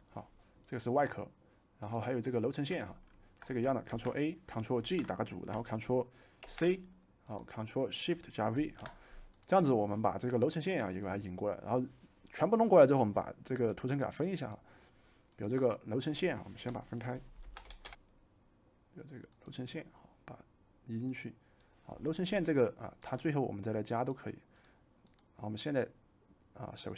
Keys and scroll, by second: 3.9 ctrl+a, 4.8 ctrl+g, 6.4 ctrl+c, 8.5 ctrl+shift+v, 17.4-18.2 typing.